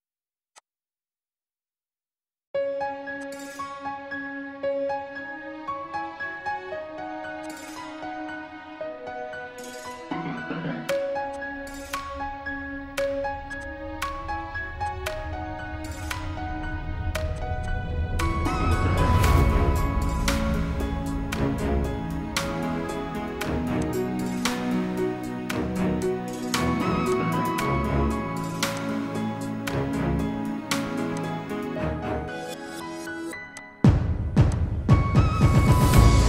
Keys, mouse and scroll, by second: 11.6 alt+scroll down 1, 13.5 double click, 15.6 4, 16.4 alt+scroll up 1, 17.9 alt+scroll up 1, 18.0 alt+scroll down 1, 19.4 alt+scroll down 1, 21.0-21.4 alt+scroll down 3, 32.7 right click.